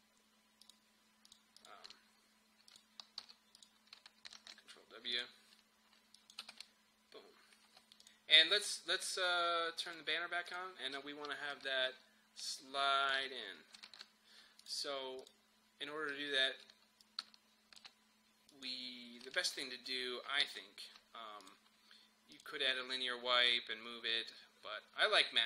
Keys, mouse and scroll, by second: 3.2 u, 3.6 click, 4.4 ctrl+w, 5.2 click, 6.4 space, 8.1-13.9 drag, 13.9 ctrl+z, 14.6-18.5 drag, 19.3 ctrl+z, 20.5 ctrl+z, 21.4 click.